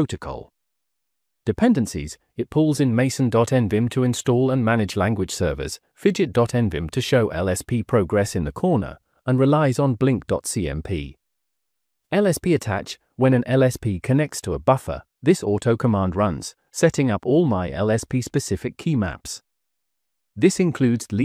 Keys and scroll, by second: 1.5 j, 1.9 j, 2.4 j, 18.4-21.2 typing.